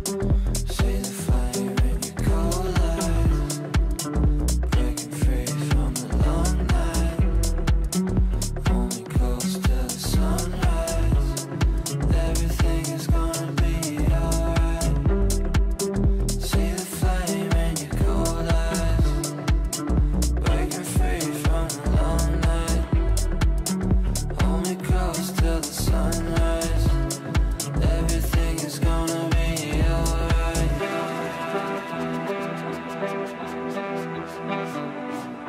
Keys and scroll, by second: 6.2 g, 19.1 g, 30.2 g.